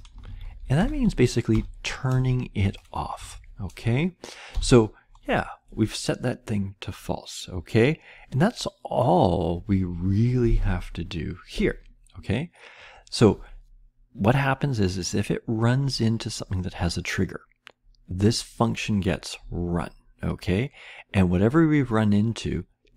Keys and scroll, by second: 0.0-1.5 typing, 3.1 Right, 4.2-4.9 typing.